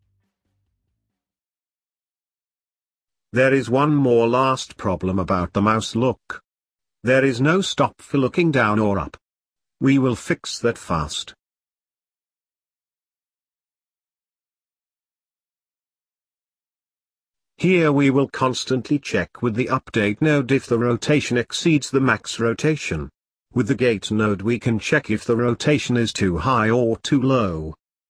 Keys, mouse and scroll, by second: 0.4 ctrl+s, 15.1-15.5 scroll up 2, 15.5 middle click, 16.3-17.0 scroll up 5, 17.0-18.2 middle drag, 18.2 shift+a, 23.0 shift+a, 27.7 click.